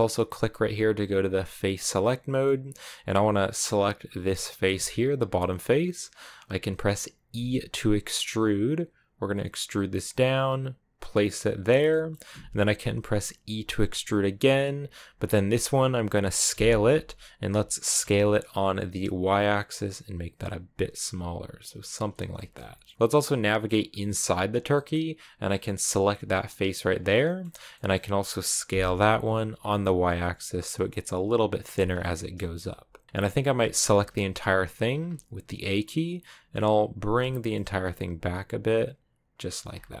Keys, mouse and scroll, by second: 1.5 click, 1.9 middle click, 2.4-4.1 scroll up 1, 4.1-5.2 right drag, 5.2-7.2 middle drag, 7.2 e, 11.7-13.3 shift+middle drag, 13.3 e, 15.1-16.3 middle drag, 16.3 s, 22.2-23.5 shift+middle drag, 23.5-24.6 scroll up 3, 24.6 middle click, 25.4-26.4 right drag, 26.4-26.9 scroll down 4, 26.9-28.6 middle drag, 28.6 s, 31.7 scroll down 1, 31.8-33.4 middle drag, 33.4 a, 33.7 a, 34.8-36.8 scroll up 2, 36.8 g, 39.4 Tab, 39.5-40.0 scroll down 5.